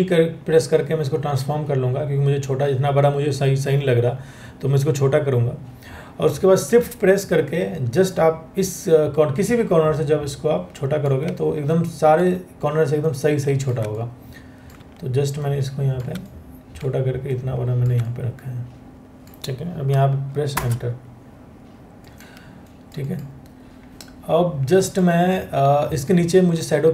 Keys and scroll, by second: 20.1 Return.